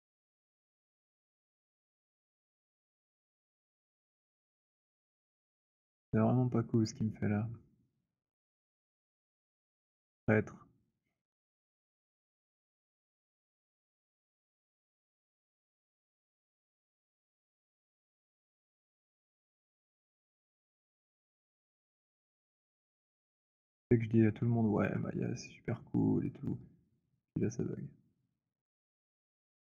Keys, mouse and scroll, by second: 1.4 click, 3.3 click, 4.2 click, 5.4 alt+click, 6.9 click, 9.1 right click, 10.3 click, 12.3 click, 13.3 alt+click, 15.4 click, 18.2 click, 19.6 alt+click, 20.8 click, 23.2 click, 24.7 alt+click, 25.6 alt+middle click, 26.3 click, 28.7 click.